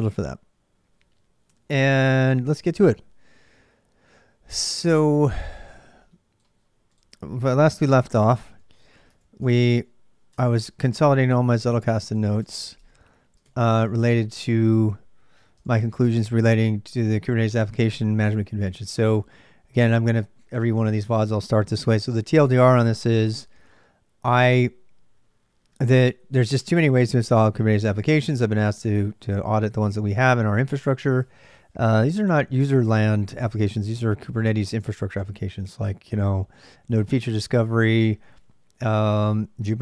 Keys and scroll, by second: 7.7-15.9 typing, 12.2 Tab.